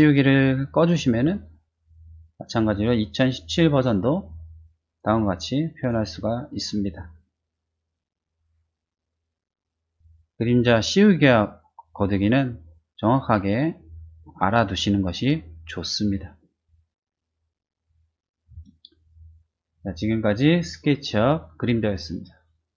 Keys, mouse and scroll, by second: 0.5 click, 3.7 click, 4.3 click, 4.7 middle click, 4.8 click, 4.9 middle click, 5.2 middle click, 5.3 click, 15.9-19.7 drag, 18.5 space.